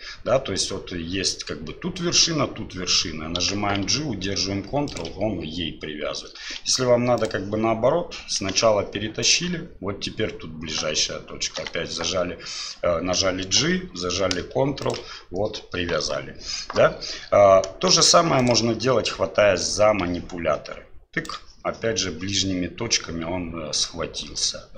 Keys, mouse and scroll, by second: 3.4 g, 6.6 g, 8.4 g, 11.6 g, 17.9 g, 19.6-21.3 drag, 24.4-24.7 drag.